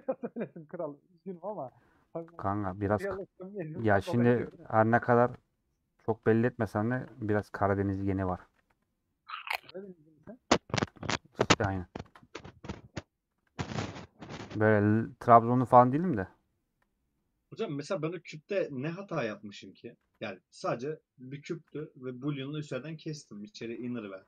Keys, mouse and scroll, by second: 1.6 middle click, 2.3 Tab, 3.2 ctrl+z, 4.7 shift+click, 5.0-6.1 middle drag, 6.1 shift+click, 6.3-7.9 middle drag, 7.9 shift+click, 8.5 ctrl+z, 9.0 shift+click, 9.4-10.6 middle drag, 10.6 shift+Left, 10.9-12.0 middle drag, 12.0 ctrl+b, 13.4 ctrl+b, 15.4 shift+click, 16.4 shift+click, 16.9 middle click, 17.5 shift+click, 19.3 middle click, 20.0 ctrl+b, 21.9-23.7 middle drag, 23.7 Tab, 24.0-24.2 middle drag.